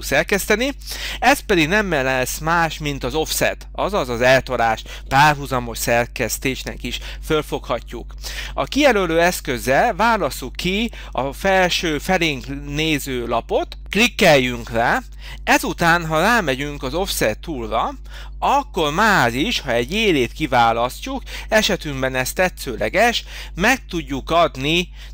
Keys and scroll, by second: 9.3 space.